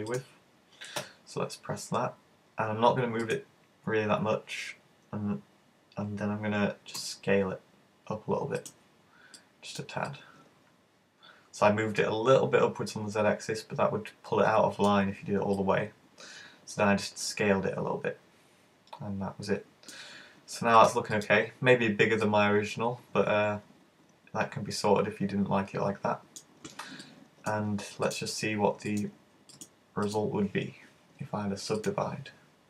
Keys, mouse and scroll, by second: 0.2 click, 1.0 e, 3.3 click, 7.0 s, 8.8 click, 9.5 ctrl+click, 10.1 middle click, 15.6 middle click, 20.8 click, 21.8-22.2 scroll down 2, 22.2 middle click, 27.0 middle click, 28.1 right click, 29.6 click, 29.7 right click, 30.1 right click, 31.8 click.